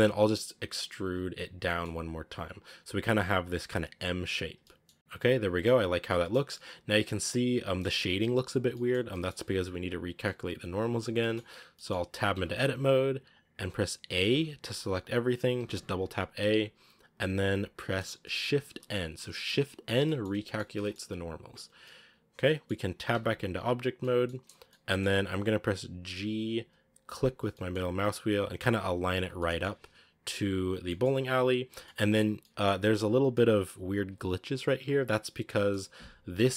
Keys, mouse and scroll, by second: 0.9 e, 4.4 scroll down 1, 4.5-5.9 middle drag, 4.9 Tab, 5.9 scroll down 1, 6.0-6.3 middle drag, 6.3 scroll up 1, 6.4-8.5 middle drag, 8.5 scroll up 1, 8.6 middle click, 8.8 scroll down 2, 9.0-12.2 middle drag, 12.2 Tab, 14.0 a, 14.2 a, 15.5 a, 15.6 a, 18.6 shift+n, 19.5-19.9 scroll down 2, 19.9-20.9 middle drag, 20.9-21.7 scroll up 2, 21.7-23.0 middle drag, 23.0 Tab, 23.9-26.0 middle drag, 26.0 g, 29.3-29.7 middle drag, 29.7-30.7 scroll up 2, 30.7 scroll down 1, 30.8 middle click, 31.4 scroll up 1, 31.7-32.6 shift+middle drag, 32.6 scroll up 1, 33.2-35.3 middle drag, 35.3 scroll down 2, 35.4-36.3 middle drag, 36.3-36.5 right drag.